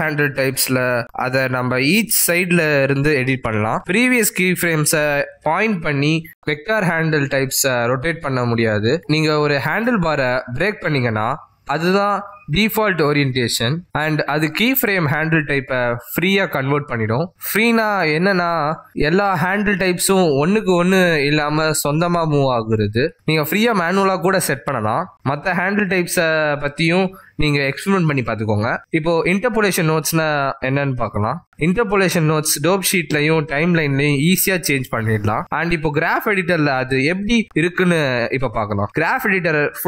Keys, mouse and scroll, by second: 0.3 g, 3.5 click, 3.8 g, 6.5 click, 7.0 r, 10.8 click, 11.4 g, 15.9 ctrl+Tab, 18.5 v, 20.9 click, 21.7 v, 26.1 ctrl+z, 26.9 ctrl+Tab, 28.0 ctrl+z, 28.7 ctrl+z, 37.0 click.